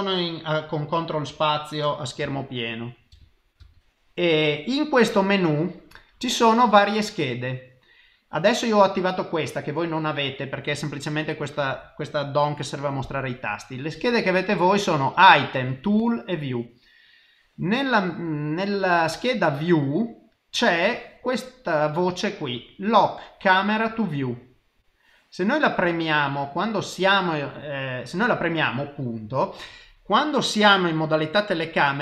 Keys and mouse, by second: 2.2 n.